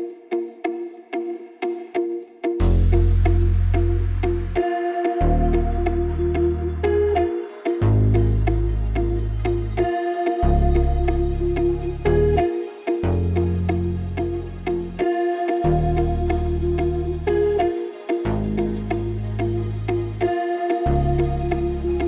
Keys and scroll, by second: 6.1 typing, 7.7-10.7 typing, 11.2 Return, 15.0 space.